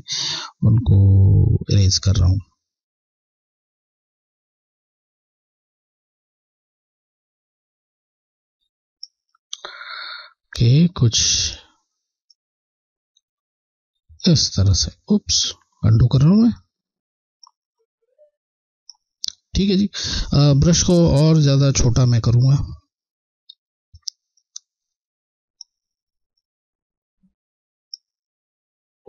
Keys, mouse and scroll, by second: 5.8 click, 7.4 click, 11.0 click, 11.2 click, 12.7 click, 12.9 click, 16.7 click, 18.2 click, 18.4 click, 22.2 typing, 23.9 typing, 24.1 click, 24.1 Left, 24.1 click, 24.3 click, 24.5 click, 27.0 click.